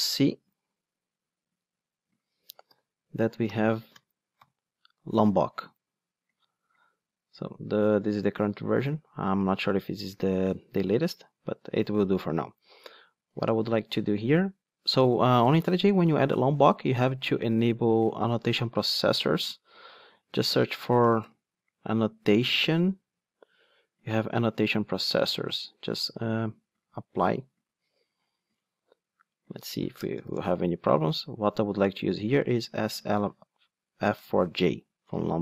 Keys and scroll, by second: 2.7 super+f, 12.4 ctrl+Tab, 34.2 Return.